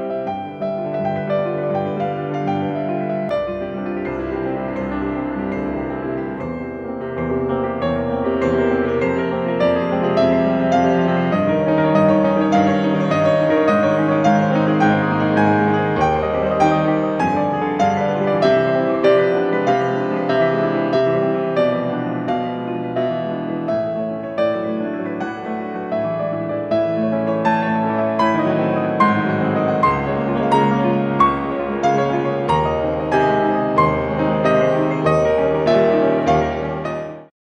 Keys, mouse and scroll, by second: 1.3-1.6 scroll down 2, 1.6-2.2 scroll up 2, 5.7 scroll down 2, 6.0-6.9 scroll up 2, 8.4 Escape, 8.5 scroll up 1, 9.0 5, 9.2 click, 9.9 click, 10.4 5, 11.2 2, 12.0 2, 12.0 Return, 12.9 0, 15.4 scroll up 2, 15.6-16.1 scroll down 2, 16.3 middle click, 16.8-17.2 scroll down 2, 17.2-17.7 scroll up 2, 17.7-18.0 scroll up 1, 19.7 scroll down 2, 19.9 scroll up 2, 20.0 middle click, 20.1 scroll down 2, 20.2 scroll up 2, 20.3 middle click, 25.3 middle click, 25.5-26.1 scroll up 1, 27.7 scroll down 1, 27.8-28.3 scroll up 2, 27.9 middle click, 28.3 middle click, 28.5 scroll down 1, 28.7 scroll up 1, 30.6 scroll down 1, 30.8 scroll up 1, 32.1 ctrl+d, 35.2-35.7 scroll up 1, 35.2 0, 35.7-36.0 scroll down 2, 36.3-36.7 scroll up 2.